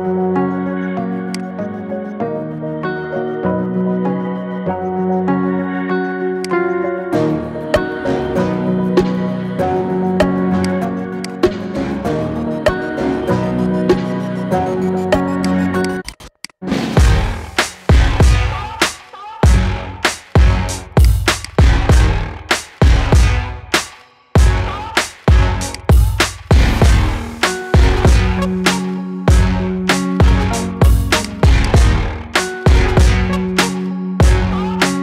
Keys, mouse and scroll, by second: 4.0-4.5 scroll down 5, 4.5 middle click, 5.0-6.2 scroll up 4, 6.2-8.2 shift+drag, 8.2-8.6 scroll down 5, 8.6-9.2 middle drag, 9.2 scroll up 1, 9.5 shift+middle click, 10.4-12.1 drag, 12.1-12.5 scroll up 4, 12.5-13.6 shift+middle drag, 13.6 Tab, 15.6 alt+shift+click, 16.2 alt+shift+click, 17.6-18.5 scroll down 10, 18.5 middle click, 19.1-19.6 scroll up 10, 19.8-20.8 middle drag, 20.8 alt+shift+click, 21.2 alt+shift+click, 21.6-23.5 middle drag, 23.5 ctrl+b, 25.9 scroll down 6, 26.5 middle click, 27.2-27.6 scroll up 5, 27.6-30.1 shift+middle drag, 30.1 Tab, 30.6-31.1 middle drag, 31.1 right click, 32.0 scroll down 4, 34.9 click.